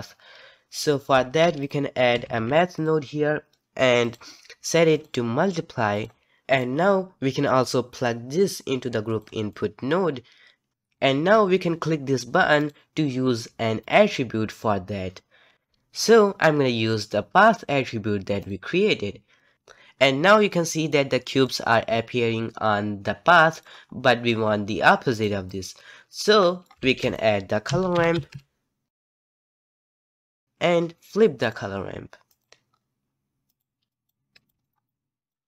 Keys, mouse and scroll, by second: 1.1 shift+a, 4.9-6.5 drag, 6.6-9.6 drag, 12.6-15.5 drag, 20.3-25.1 middle drag, 25.1 click, 25.5 click, 26.4 middle click, 26.8 shift+a, 31.1 middle click, 31.4-32.7 drag, 32.7-33.5 scroll down 1, 33.5 click, 33.9-34.3 drag, 34.6 scroll down 1, 34.6 middle drag, 34.8 click, 35.4 scroll down 2.